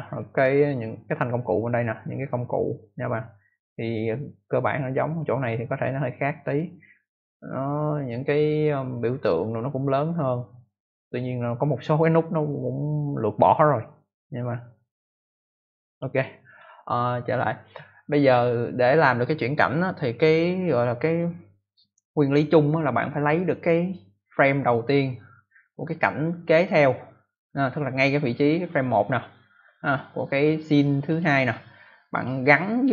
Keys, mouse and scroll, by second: 14.7 click, 31.0 click, 32.1 click.